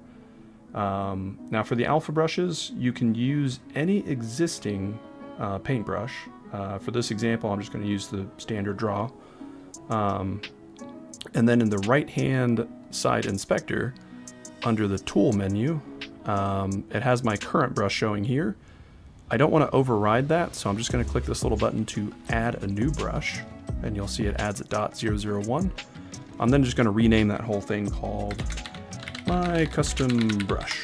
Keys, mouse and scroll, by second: 6.9 click, 7.9 click, 12.3 click, 12.8 click, 22.2 click, 25.9-30.7 drag.